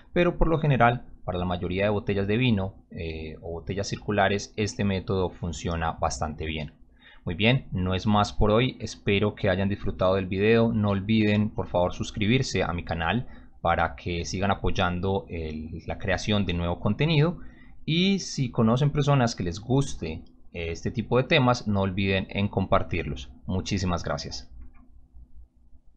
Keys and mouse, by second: 25.9 click.